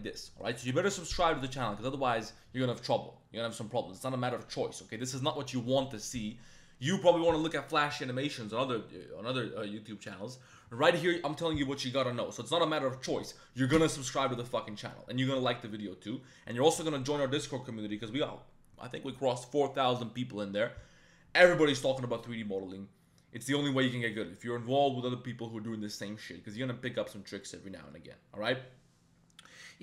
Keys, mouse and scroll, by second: 1.6 middle click.